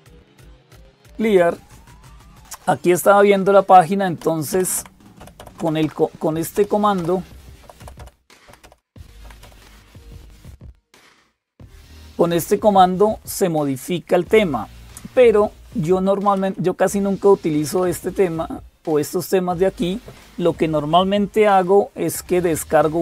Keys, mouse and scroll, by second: 0.0-23.0 typing, 4.0 Up, 4.4 Up, 4.6 Up, 5.0 Up, 5.2 Up, 5.4 Up, 5.7 Up, 6.4 Up, 6.8 Up, 7.4 Up, 7.6 Up, 7.8 Up, 8.3 Up, 8.5 Up, 8.6 Up, 9.3 Up, 9.5 Up, 9.9 Up, 10.1 Up, 10.8 Down, 15.6 Down, 15.8 Down, 16.2 Up, 16.4 Up, 17.6 Down, 18.0 Up, 22.1 Down.